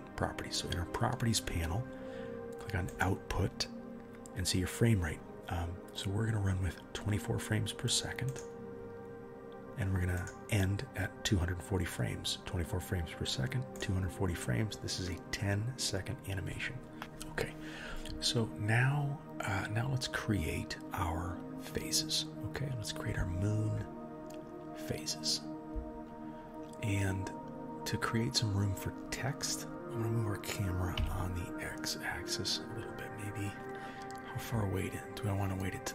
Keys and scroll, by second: 29.7 g.